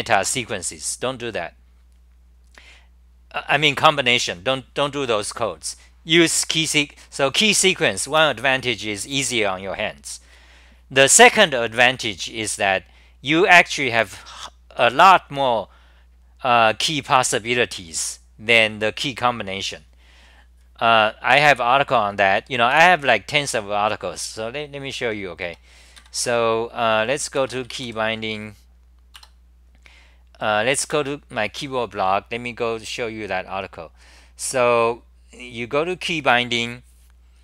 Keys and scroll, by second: 22.7 super+w, 29.3 Return, 30.8 super+r.